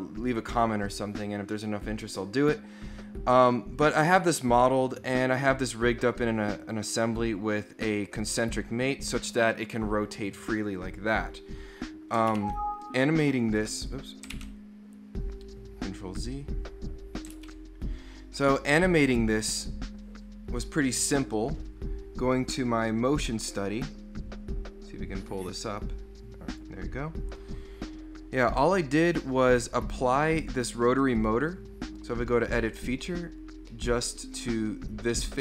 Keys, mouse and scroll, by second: 6.6-10.6 drag, 12.3 ctrl+x, 13.8 click, 14.4 ctrl+z, 15.8 scroll up 2, 16.2 scroll down 2, 17.4 ctrl+b, 19.3 click, 22.6 drag, 26.5 click, 29.0 right click, 31.2 click, 33.1-33.5 scroll down 2, 33.7 middle click, 35.1-35.4 scroll up 1.